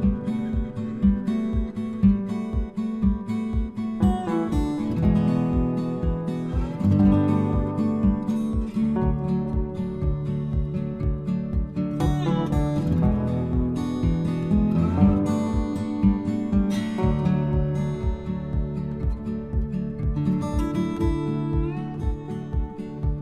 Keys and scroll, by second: 6.4 ctrl+z.